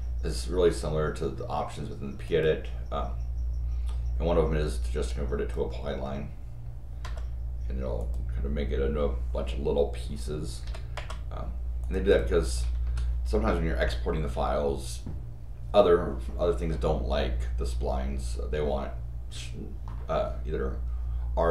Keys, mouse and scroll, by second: 2.2 click, 5.0 click, 7.0 Return, 8.0 click, 10.9 Return, 11.8 click, 12.1 click, 12.4 click, 12.7 Escape.